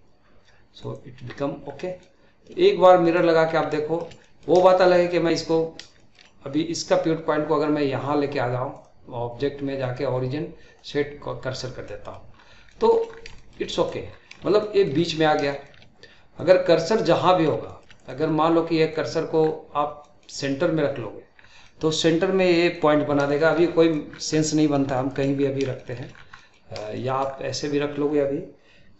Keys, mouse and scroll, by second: 1.6-2.0 scroll down 1, 2.0-3.1 middle drag, 3.1-3.7 scroll up 3, 3.7-8.8 shift+middle drag, 8.8-11.5 drag, 11.5 scroll down 1, 11.8-12.4 middle drag, 12.4-12.7 scroll up 2, 12.7-13.1 shift+middle drag, 13.1 scroll down 2, 13.4-13.7 shift+middle drag, 13.7-14.1 drag, 14.1-14.6 scroll up 5, 14.6-15.1 shift+middle drag, 15.1-15.5 scroll up 2, 15.5-16.4 shift+middle drag, 16.4-16.9 drag, 16.9-17.5 middle drag, 17.5 scroll up 2, 17.6 shift+middle click, 18.0-19.4 drag, 19.4-20.0 scroll down 1, 20.0-21.4 middle drag, 21.4 scroll down 1, 21.6-23.0 middle drag, 23.0-23.4 scroll up 2, 23.4-23.8 shift+middle drag, 23.8-24.2 drag, 24.2 scroll down 2, 24.4-25.4 middle drag, 25.4-25.8 scroll down 1, 25.8 shift+middle click, 26.1 scroll down 1, 26.4 middle click, 26.7 scroll up 2, 26.9-27.3 shift+middle drag, 27.3 scroll down 2, 27.5-28.9 middle drag.